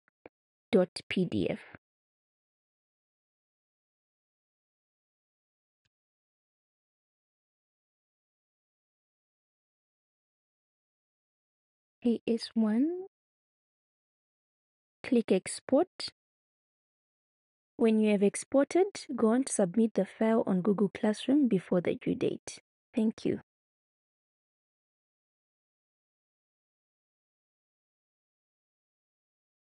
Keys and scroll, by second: 3.5 BackSpace, 4.4 Right, 5.1 Right, 5.9 BackSpace, 6.4 BackSpace, 7.1 BackSpace, 9.3 shift+a, 10.2 shift+s, 11.7 1, 13.8-15.2 typing.